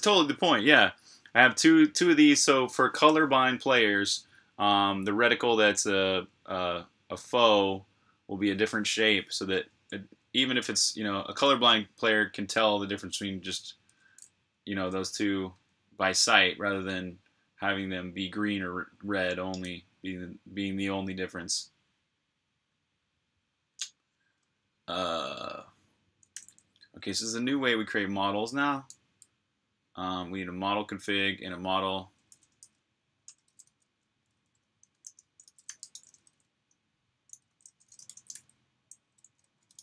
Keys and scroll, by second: 13.8 ⟲, 15.3 k, 24.2 k, 28.7-29.4 typing, 32.8-39.8 typing.